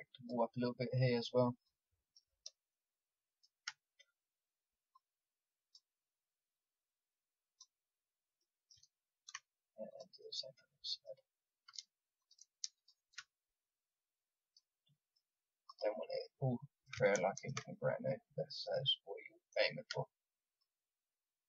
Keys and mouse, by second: 8.3-9.8 middle drag, 9.8 click, 11.0-14.5 drag, 14.8-16.1 drag, 16.3-17.4 drag, 17.8 middle click, 19.5-21.4 drag.